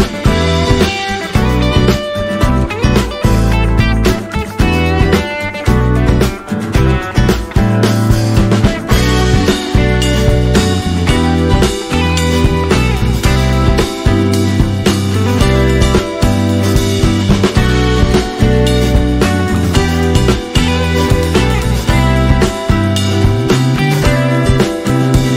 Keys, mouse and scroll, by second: 1.9 shift+click, 3.7 click, 4.4 alt+scroll up 1, 6.1-7.6 shift+drag, 8.8-9.9 alt+scroll down 2, 9.9-13.3 drag, 13.3 space, 14.5-19.0 drag, 19.0 Up, 22.1 Up, 22.5-24.8 alt+drag.